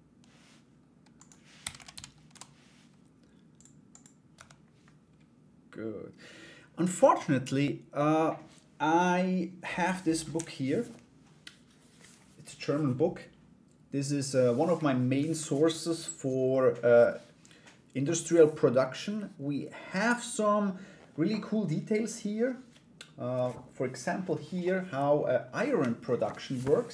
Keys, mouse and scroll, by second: 0.8-2.4 drag, 4.0 Tab.